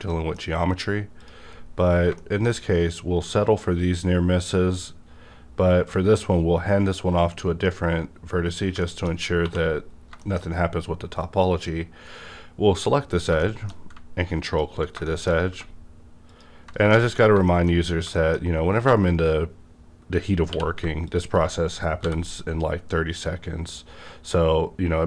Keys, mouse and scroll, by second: 0.1 shift+middle click, 0.1 shift+r, 0.4-1.2 shift+scroll up 2, 1.2 click, 1.2-1.8 scroll up 1, 1.8 scroll down 2, 2.2 shift+middle click, 3.4 click, 8.5 scroll down 1, 8.8 shift+middle click, 8.8 shift+middle click, 9.4 2, 9.9 scroll down 1, 10.2 middle click, 11.3 click, 13.4 shift+middle click, 13.6 shift+middle click, 13.6 click, 14.4 ctrl+click, 14.5 shift+middle click, 15.2 shift+middle click, 15.2 ctrl+click, 17.4 shift+middle click, 17.7 shift+scroll up 2, 18.1 shift+middle click, 18.4 scroll up 1, 20.5 q, 21.0 shift+click, 22.0 b.